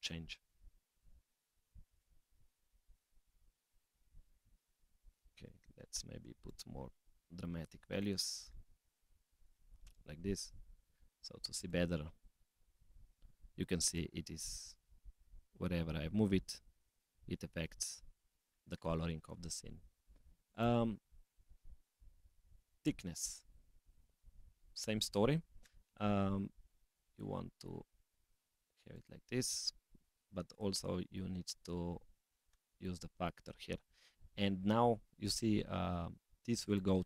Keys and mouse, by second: 3.7 click, 3.8 middle click, 5.0 click, 6.4-8.1 drag, 8.8-10.2 drag, 11.6 click, 12.8 click, 13.8 click, 14.8 g, 16.6 middle click, 16.8 click, 17.0 middle click, 18.3-20.5 middle drag, 20.5 click, 22.4-24.3 drag, 26.7 click, 27.8-29.2 drag, 36.6 click.